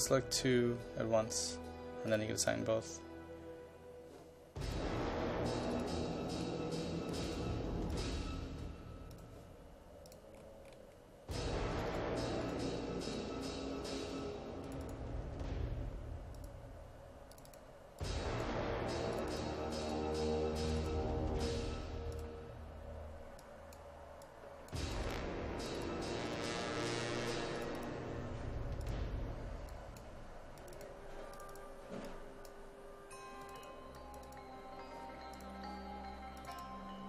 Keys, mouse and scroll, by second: 2.9-4.7 scroll down 1, 4.7 click, 10.4-11.7 scroll down 1, 11.7 click, 13.7-14.7 scroll up 1, 14.7-32.1 drag, 33.8-37.0 drag.